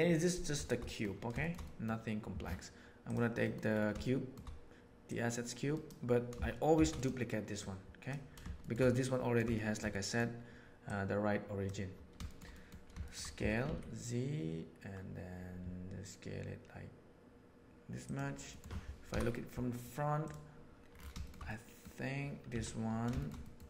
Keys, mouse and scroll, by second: 0.8 middle click, 1.4 shift+middle click, 1.6 middle click, 3.4 middle click, 4.0-4.3 shift+middle drag, 5.0 click, 6.7 shift+d, 7.6 middle click, 8.6 shift+middle click, 8.9-9.3 middle drag, 9.5 shift+middle drag, 9.9 middle drag, 10.9 click, 12.5 middle click, 13.0 shift+middle click, 13.3 s, 18.5 middle click, 19.1 KP_1, 21.2 shift+middle drag, 21.4-21.8 middle drag, 22.5 Tab, 23.4 middle click.